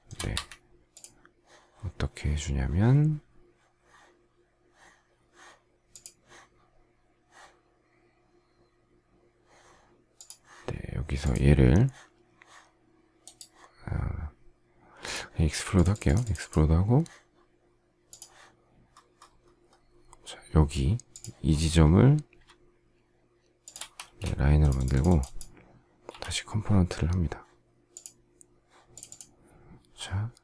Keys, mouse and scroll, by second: 0.3 Escape, 23.5 shift+click, 23.9 space, 26.0 g.